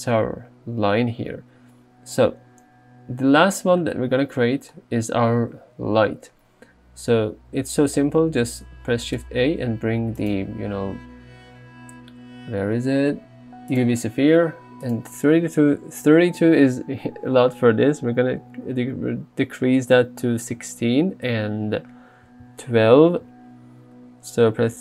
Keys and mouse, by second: 9.5 shift+a, 15.1 click.